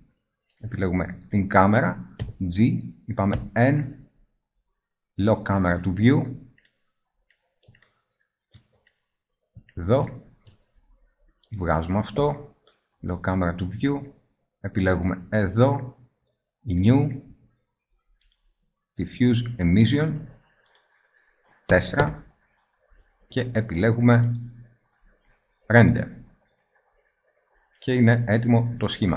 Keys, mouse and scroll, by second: 0.6 click, 1.1 right click, 2.0 g, 3.2 n, 5.9 click, 9.9 middle click, 12.1 n, 16.0 middle click, 19.8-20.5 middle drag, 20.5-22.3 drag, 23.9-25.0 drag, 27.0-29.0 middle drag, 29.0 ctrl+b.